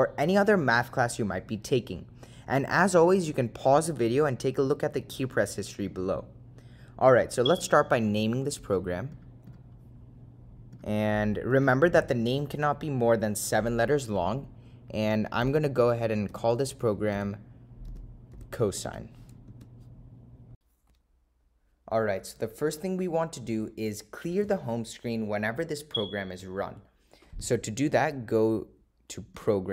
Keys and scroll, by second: 9.3 Right, 9.6 Right, 10.8 Return, 16.4 7, 19.7 Return.